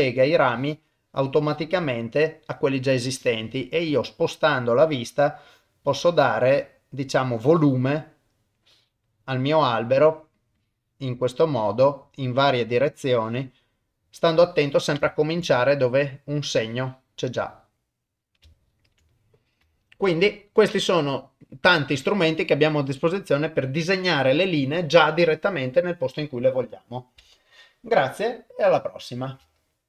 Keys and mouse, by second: 0.3 click, 1.4 click, 1.8 middle click, 3.0 click, 3.6-4.6 middle drag, 5.3 click, 5.9 middle click, 7.3 click, 8.6 click, 9.2 middle click, 10.6 click, 11.5 click, 11.9 middle click, 13.7 middle click, 14.5 shift+middle click, 15.0 ctrl+middle click, 15.4 middle click, 16.3 click, 17.4 middle click, 18.6 ctrl+middle click, 19.1 middle click, 19.8 ctrl+middle click, 20.1 middle click.